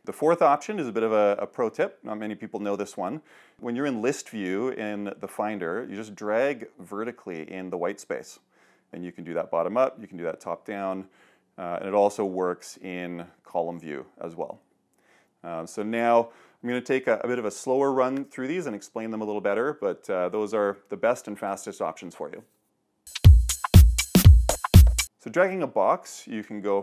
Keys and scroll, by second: 0.0 super+h, 0.9 super+2.